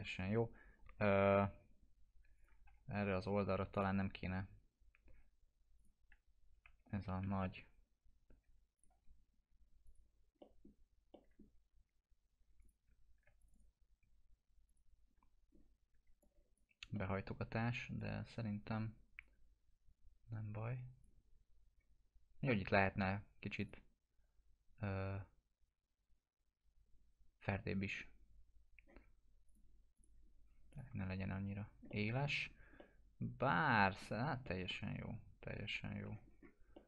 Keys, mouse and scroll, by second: 2.3 click, 2.6 F4, 3.7 click, 4.2 scroll up 1, 5.7 click, 6.5 F4, 7.6 scroll up 1, 7.9 scroll down 1, 8.8 click, 10.4 alt+middle click, 11.5 scroll down 1, 12.6 click, 13.4 click, 14.7 shift+click, 15.4 scroll down 1, 16.2-16.8 alt+click, 16.9 alt+middle click, 18.0-21.1 drag, 21.3 scroll up 1, 23.6 click, 29.4 click, 30.9 F4, 31.5 scroll down 1, 31.9-32.5 alt+middle click, 32.4 scroll down 1, 32.8-34.0 alt+middle drag, 34.1 scroll down 1, 34.4-36.3 alt+middle click, 36.2-36.6 scroll up 1.